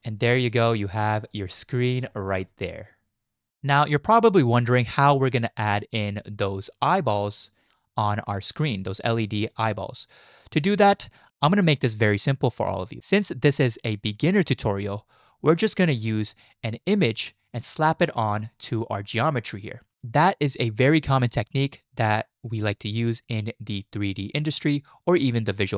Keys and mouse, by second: 0.4-1.0 middle drag, 2.1 shift+middle drag, 2.4-3.5 drag, 6.0 click, 7.4 click, 9.2 shift+drag, 17.1 shift+drag, 17.9-18.4 shift+drag.